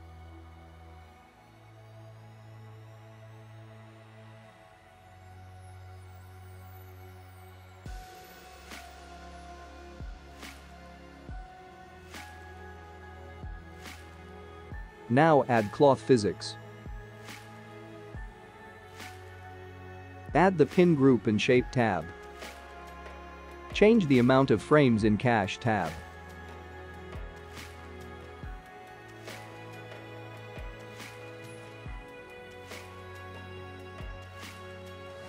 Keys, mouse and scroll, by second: 2.0 click, 3.3 click, 6.4 middle click, 12.0 Tab, 13.5 click, 14.1 middle click, 16.2 click, 17.3 click, 18.0-19.8 scroll down 11, 19.8 click, 20.9 click, 23.0 click, 23.8 click, 25.5-26.9 scroll down 4, 27.2 click, 32.2 click, 33.4 space.